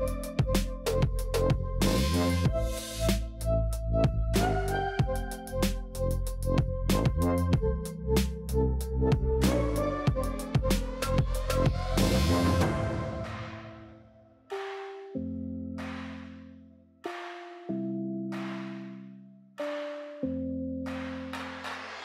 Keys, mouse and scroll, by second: 2.4 click, 3.1-3.8 middle drag, 3.8-4.1 scroll down 2, 4.1-5.2 middle drag, 8.4 click, 9.0 click, 9.1 scroll up 2, 9.3-10.6 middle drag, 10.6 scroll down 1, 10.7-11.3 middle drag, 11.3 click, 11.4 middle click, 11.6 click, 11.7 scroll up 1, 11.8-14.9 middle drag, 15.5-18.6 drag, 19.0-20.1 middle drag, 20.1 click, 21.1 click.